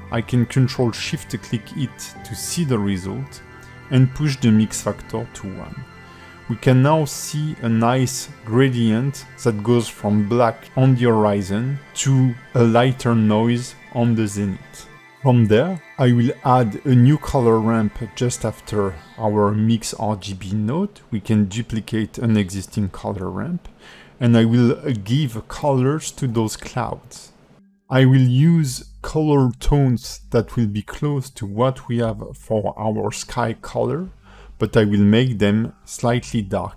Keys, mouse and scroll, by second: 2.7 ctrl+shift+click, 5.7 click, 7.4 scroll down 3, 7.9 middle click, 9.4 middle click, 13.8 click, 15.7 click, 16.5 shift+d, 22.1 click, 23.4 click, 24.8 click, 26.1 click, 30.8 click, 31.0 click, 34.7 click, 35.0 click.